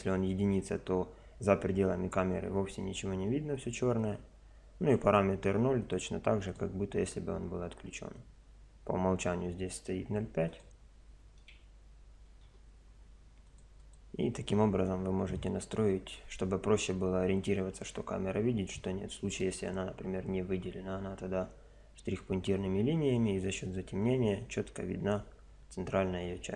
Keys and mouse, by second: 4.0 click, 8.3 click, 10.5 click, 13.5 click, 19.3-21.1 right drag.